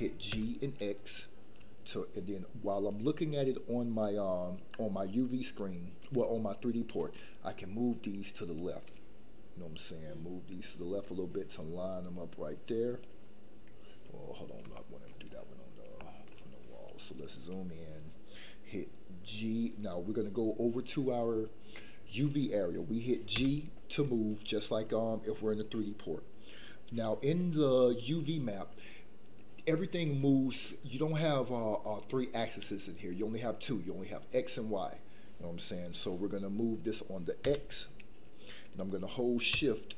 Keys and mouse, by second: 0.3 x, 12.8 click, 14.7 shift+middle click, 15.9 shift+middle click, 23.3 g, 37.4 x.